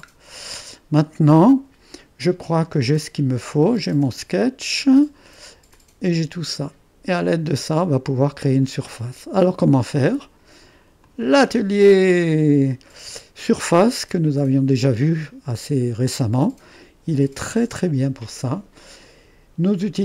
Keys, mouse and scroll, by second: 0.2-0.7 scroll down 1, 0.7-7.4 drag, 3.8 space, 5.7 typing, 11.1-12.3 drag, 13.9-16.2 drag, 16.5-19.2 drag.